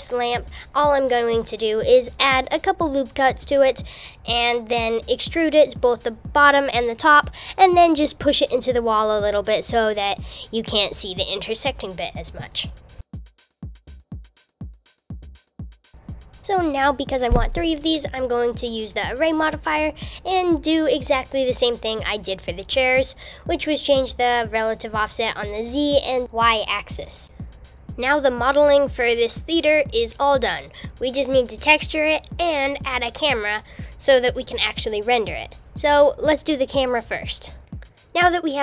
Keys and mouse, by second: 0.6 Tab, 0.8 Tab, 0.9 Tab, 1.1 Tab, 1.5 s, 2.1 super+r, 2.6 s, 4.2 click, 4.3 super+r, 9.9 g, 11.0 click, 11.4 u, 11.5 super+z, 11.6 g, 12.9-15.4 typing, 13.4 super+z, 14.3 Tab, 17.1 click, 18.1-19.2 drag, 19.6 click, 20.0-21.8 drag, 22.2-23.4 drag, 33.9 alt+a.